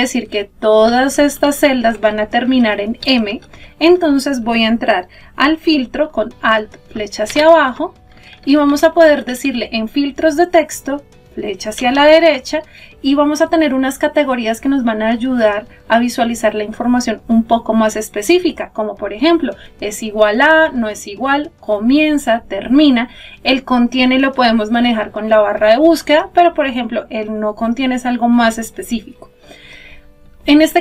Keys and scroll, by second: 7.0 alt+Down, 10.6 Up.